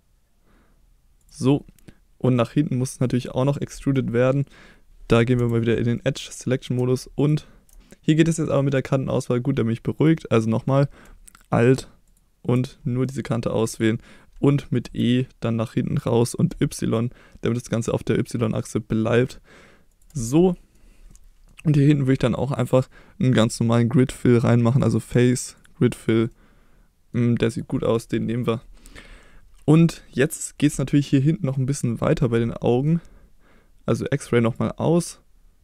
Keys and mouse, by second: 1.2 click, 1.5 middle click, 3.1 middle click, 3.8-5.4 middle drag, 5.4 2, 6.0 middle click, 7.8 middle click, 12.1 alt+click, 13.1 middle click, 14.8 e, 16.5-20.1 y, 20.0 click, 20.3 middle click, 21.1 middle click, 22.1 middle click, 24.7-25.7 drag, 26.3 middle click, 27.5 click, 31.1 middle click, 32.2 middle click, 34.5 click.